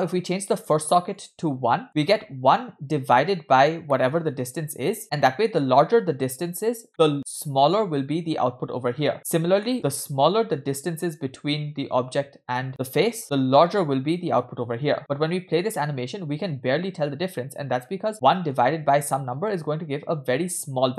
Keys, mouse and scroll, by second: 0.6 click, 1.2 click, 3.9 middle click, 6.9-8.3 scroll up 2, 8.3-9.1 drag, 9.5 scroll down 1, 9.7 middle click, 13.2 middle click, 18.0 space, 18.3 middle click.